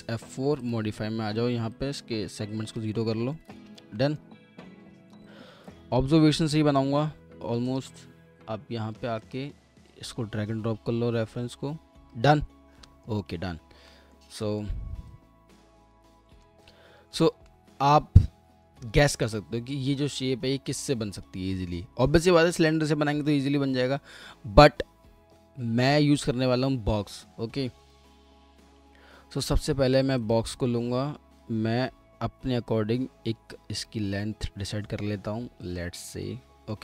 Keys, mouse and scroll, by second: 3.1 scroll down 1, 3.3 alt+middle click, 4.0 alt+middle click, 12.8 alt+middle click, 14.4 alt+middle click, 16.3 middle click, 17.8-18.4 alt+scroll up 1, 36.1 alt+middle click.